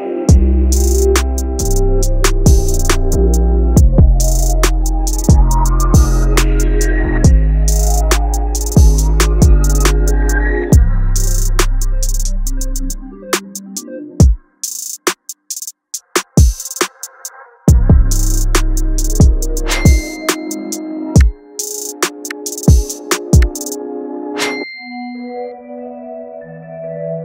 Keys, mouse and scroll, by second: 0.5 click, 0.7 click, 3.5 click, 3.7-5.7 drag, 5.7 scroll up 1, 7.0-17.3 drag, 17.3-23.8 drag, 24.0-27.2 drag.